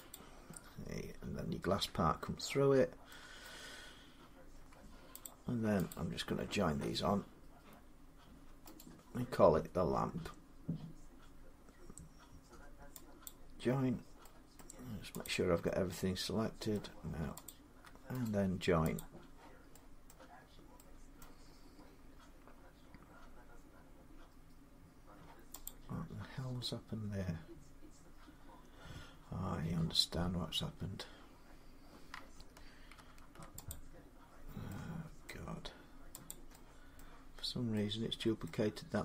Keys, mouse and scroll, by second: 2.0 middle click, 3.3 middle click, 5.1 click, 5.7 shift+click, 8.6 right click, 13.1 click, 14.4 middle click, 15.1 click, 16.5 middle click, 17.3 shift+click, 18.1 right click, 18.8 click, 19.9 middle click, 20.3 scroll, 21.0-21.4 scroll, 21.4-21.8 scroll down 7, 25.5 click, 26.1 scroll up 6, 26.3-26.7 scroll down 3, 32.8 ctrl+z, 32.8 scroll, 33.5 click, 34.1 scroll, 35.1 middle click, 36.1 click, 36.8 middle click, 37.2-37.6 scroll.